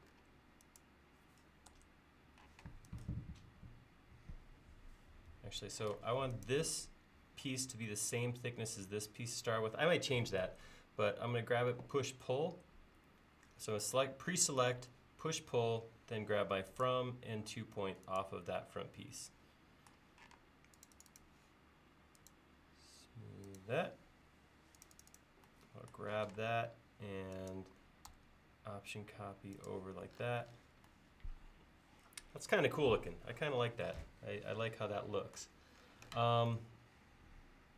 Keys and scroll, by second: 1.7 BackSpace, 5.4 Escape, 6.0 space, 14.8 p, 20.4 space, 26.3 m.